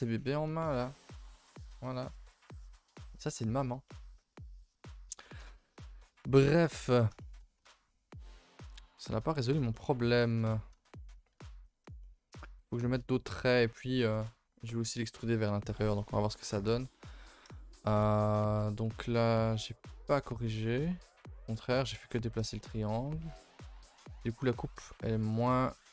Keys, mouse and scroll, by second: 0.4-1.6 scroll up 6, 0.9 middle click, 1.0 shift+middle click, 1.6-2.5 shift+middle drag, 2.5-3.1 scroll down 1, 3.1 shift+middle click, 4.2-4.6 scroll down 2, 4.6 shift+middle drag, 4.8-5.6 scroll up 2, 8.2 middle click, 8.6-9.7 scroll up 13, 9.0 shift+middle click, 9.7 middle click, 10.0-10.5 scroll down 3, 10.5 middle click, 11.2 scroll up 1, 11.4 a, 11.5 a, 11.6-15.5 middle drag, 15.5 a, 16.1-18.8 middle drag, 18.8 a, 19.0 a, 19.5 middle click, 20.2 middle click, 20.5-23.0 middle drag, 23.0 scroll down 1, 23.3 a, 23.4 a, 23.6 middle click, 23.9-24.8 scroll up 1, 24.8 k.